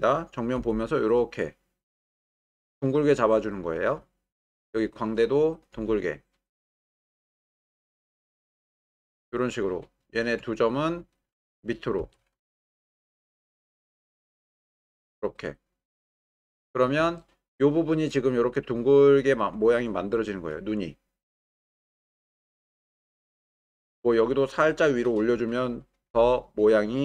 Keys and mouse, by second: 0.6 g, 5.7 g, 7.6-8.7 drag, 12.0 g, 12.4 y, 13.1 Escape, 13.8 g, 14.0 z, 15.4-16.1 drag, 17.2-18.0 shift+middle drag, 19.8 shift+middle click, 24.4-24.8 drag, 26.1 g.